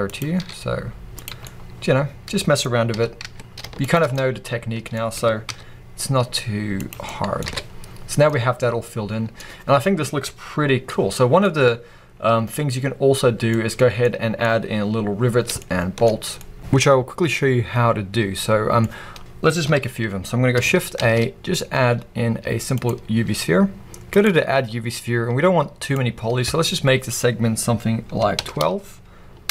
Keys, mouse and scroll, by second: 0.1 click, 0.3 s, 1.1 click, 1.3-3.8 middle drag, 2.8 g, 3.8 shift+click, 4.0 scroll down 2, 4.0-6.8 middle drag, 5.0 s, 6.8 click, 7.3 alt+a, 8.1 middle click, 11.6-16.6 middle drag, 13.4-13.9 scroll up 2, 14.5-15.5 scroll up 2, 16.1 scroll down 2, 16.6-18.4 drag, 18.4-24.1 middle drag, 19.6 KP_1, 20.4-21.0 scroll up 1, 21.0 shift+a, 24.1-29.5 drag.